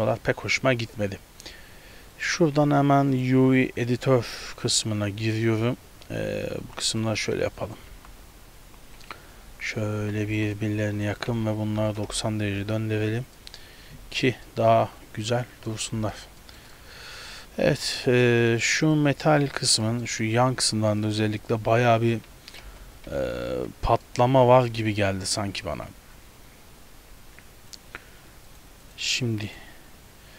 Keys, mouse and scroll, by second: 2.2 click, 3.9-5.0 scroll down 9, 5.2 scroll down 2, 6.2-8.0 typing, 9.9-11.3 typing, 13.2 Tab, 13.4 middle click, 14.2 scroll down 1, 14.5 middle click, 16.1 scroll down 3, 16.5 shift+middle click, 16.8 middle click, 17.4 scroll up 4, 17.8 shift+middle click, 18.1 middle click, 18.3-18.8 scroll up 1, 18.9 right click, 19.4 shift+middle click, 19.8 Tab, 19.9 middle click, 20.1 scroll up 1, 21.0 right click, 21.5 right click, 22.4 Tab, 22.7 KP_0, 23.2 a, 23.3 a, 23.6 z, 24.1 shift+middle click, 24.5-25.6 scroll down 8, 25.1 shift+middle click, 25.8 z, 26.4 scroll up 1, 27.9 click, 28.6 click, 29.0 click.